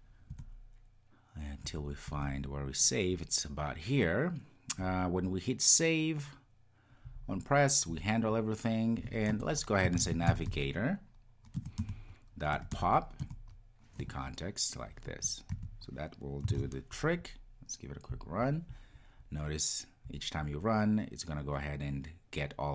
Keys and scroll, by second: 11.6 Return, 16.4 Return, 16.5 super+s, 18.1 ctrl+r.